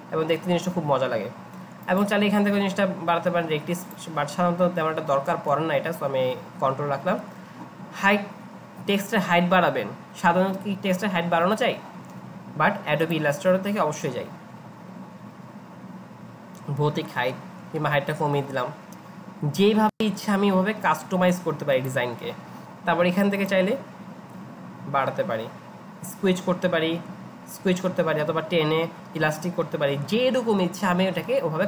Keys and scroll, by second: 5.3 ctrl+z.